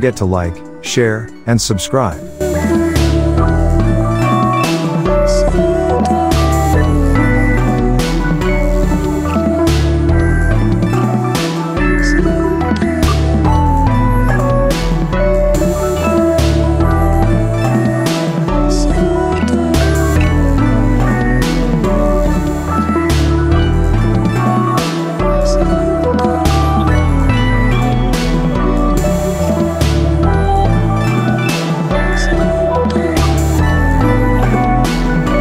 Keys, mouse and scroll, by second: 5.3 ctrl+t, 5.9-7.1 drag, 16.8 ctrl+t, 17.3-18.5 drag, 20.2 ctrl+click, 20.8 ctrl+t, 21.2-22.7 drag, 26.0 ctrl+click, 26.5 ctrl+t, 27.3-29.0 drag, 29.3-29.7 alt+scroll up 1, 30.0 click, 31.5 ctrl+click, 32.6-35.2 drag.